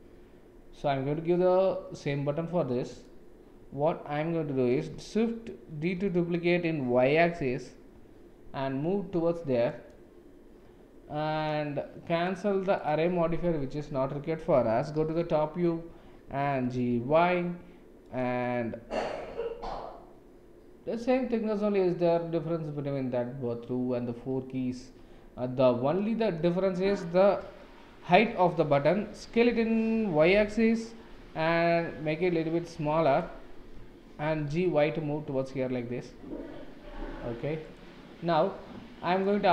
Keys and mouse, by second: 2.9 click, 6.3 shift+d, 12.2 click, 12.8 click, 14.9 KP_7, 16.6 g, 27.6 shift+middle click, 29.2 s, 34.2 g, 39.1 click.